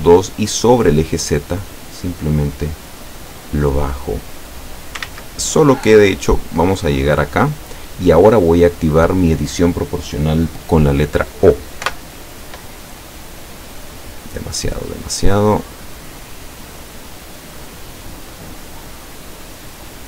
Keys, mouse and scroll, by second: 1.3-5.1 drag, 5.0 ctrl+z, 6.5-7.8 drag, 11.9 o, 13.4 click, 14.1-14.5 scroll up 2, 14.8-15.3 scroll up 2, 15.6 scroll up 2, 16.0-16.6 scroll down 4, 18.8-19.2 scroll up 2.